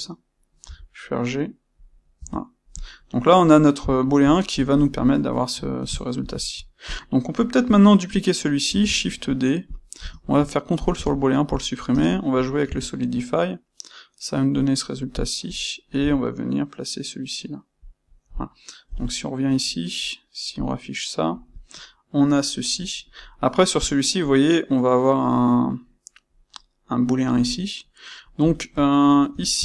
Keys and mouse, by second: 0.6 c, 1.8 click, 2.1 Tab, 2.7 click, 3.1-6.8 middle drag, 6.8 click, 8.6 shift+d, 9.7 click, 9.9 space, 11.2-11.9 shift+middle drag, 11.9 space, 15.1 click, 15.9 c, 17.9 click, 18.8 KP_1, 20.5 click, 27.7-29.6 middle drag.